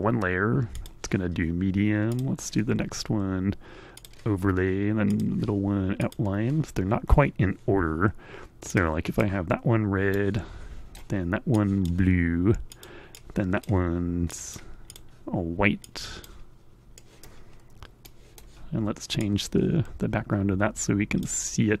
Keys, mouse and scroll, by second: 0.2 click, 1.7 click, 3.4 click, 4.6 click, 5.4 click, 8.0 click, 9.7-10.7 right drag, 11.1 click, 12.2 click, 12.7 click, 13.7 click, 14.4 click, 15.4 click, 16.5 middle click, 17.6 right click, 18.7-20.9 drag, 21.3 middle click.